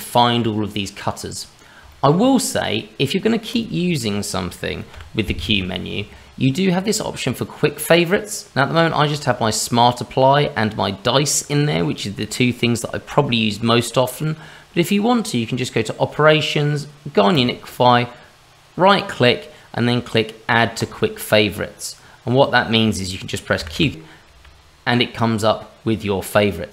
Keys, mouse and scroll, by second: 1.1-1.8 scroll up 2, 1.9 shift+middle click, 2.2 middle click, 3.0 scroll up 1, 3.5 click, 3.9 shift+middle click, 4.9 q, 23.6 q, 23.7 q.